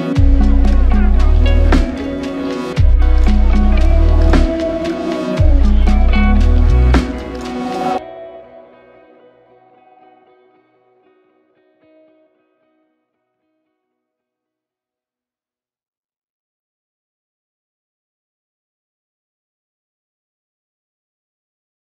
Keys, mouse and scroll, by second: 0.4 ctrl+z, 0.7 ctrl+z, 1.4 ctrl+z, 3.3 ctrl+shift+click, 5.1 ctrl+shift+click, 6.1 ctrl+shift+click, 6.4 ctrl+shift+click, 11.3 ctrl+z, 12.5 ctrl+z, 12.8 ctrl+shift+click, 14.2 ctrl+shift+click, 15.6 ctrl+shift+click, 15.9 ctrl+shift+click, 20.7 ctrl+z.